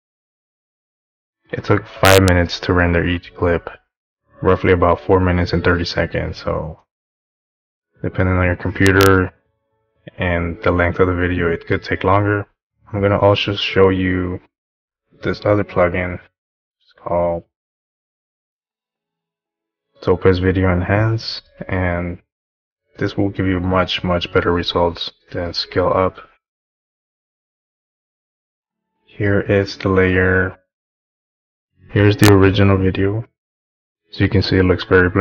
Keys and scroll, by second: 12.8 Home.